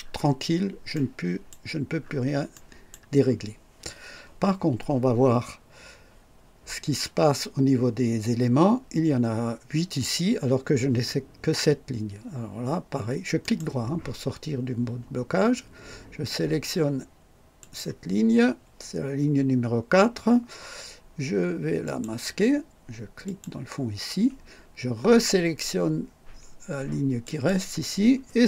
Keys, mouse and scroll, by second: 0.9 right click, 1.9 scroll up 1, 2.5 right click, 13.4 right click, 17.5 click, 21.8 click, 23.2 click, 27.2 click.